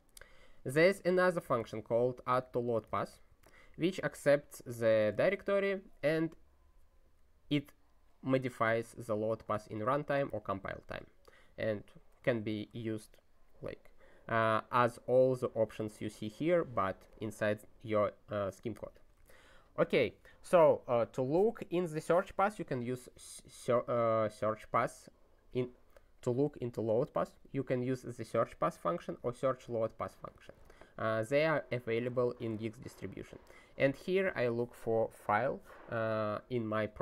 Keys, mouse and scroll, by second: 0.8 (, 2.6 o, 2.9 Return, 3.3 space, 5.1 ", 9.1 ctrl+a, 9.4 ctrl+space, 9.5 ctrl+e, 9.9 alt+;, 10.7 ctrl+s, 12.5 ctrl+n, 15.2 click, 16.1 click, 18.5 click, 19.1 ctrl+a, 24.4 click, 29.2 ctrl+n, 30.0 ctrl+p, 30.3 ctrl+e, 32.2 ctrl+n, 32.5 ctrl+e.